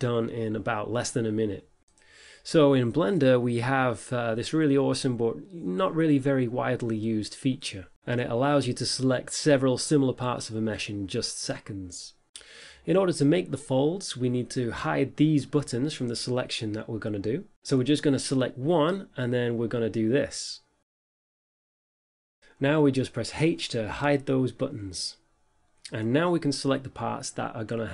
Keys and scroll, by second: 2.1 Tab, 8.6 z, 23.8 h.